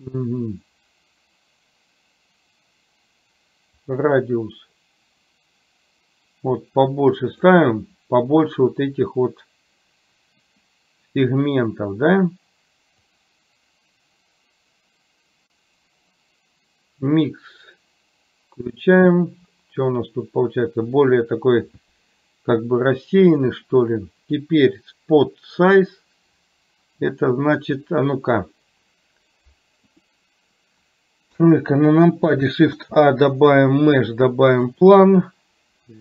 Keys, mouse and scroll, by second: 3.9-7.6 drag, 13.1-18.8 drag, 31.4 KP_3, 32.8 shift+a.